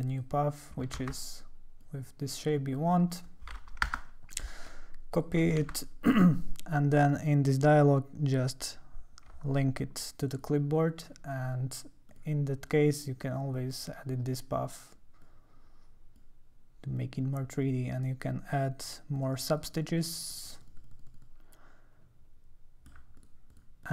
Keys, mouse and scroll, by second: 0.1 click, 1.1 ctrl+z, 1.4 click, 2.5 click, 3.9 Return, 5.1 click, 6.4 ctrl+c, 6.4 click, 10.3 click, 10.4 [, 12.1 click, 12.8 click, 13.2 click, 14.3 click, 15.2 click, 17.0 click, 19.1 click, 19.4 click, 19.5 click, 19.6 click, 19.8 click, 20.0 click, 20.2 click, 20.3 click, 20.6 click, 20.8 click, 21.1 click, 21.2-22.9 drag, 23.2 click, 23.5 click, 23.8 click.